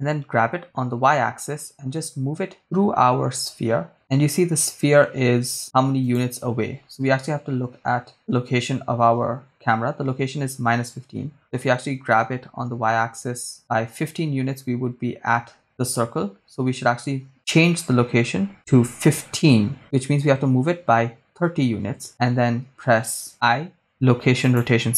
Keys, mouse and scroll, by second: 0.2 g, 0.6 y, 6.1-7.7 drag, 6.1 right click, 11.9 g, 12.3 y, 18.6 1, 18.7 5, 19.8 BackSpace, 20.5 3, 20.5 0, 21.8 Return, 23.3 i.